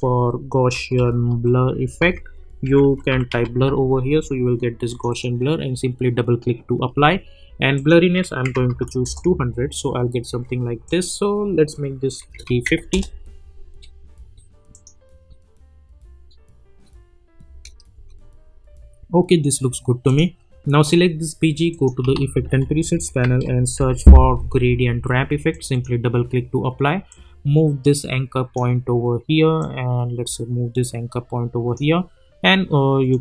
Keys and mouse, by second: 0.5-3.8 typing, 2.0 ctrl+a, 4.9 click, 7.7 click, 9.0 Return, 12.9 Return, 14.7 click, 17.5 space, 20.0 click, 22.1 ctrl+a, 22.7-24.2 typing, 25.5-33.1 drag.